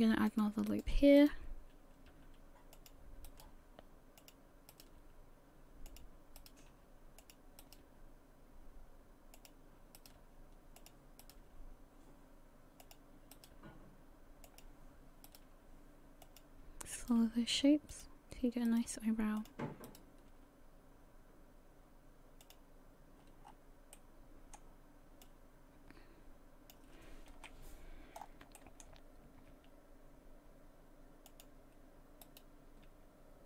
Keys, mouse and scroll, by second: 1.2 right click, 2.1 g, 3.3 right click, 3.5 g, 4.7 right click, 5.0 g, 6.4 right click, 6.7 g, 7.6 right click, 7.8 g, 10.0 right click, 10.2 g, 11.2 right click, 11.4 g, 13.3 right click, 13.5 g, 15.3 right click, 15.5 g, 17.0 right click, 17.2 g, 18.7 right click, 18.9 g, 19.9 right click, 20.3 g, 23.4-23.9 scroll down 4, 23.9 middle click, 25.2 click, 27.4 KP_1, 28.2 scroll up 6, 28.6 shift+middle click, 29.5 g, 32.9 right click.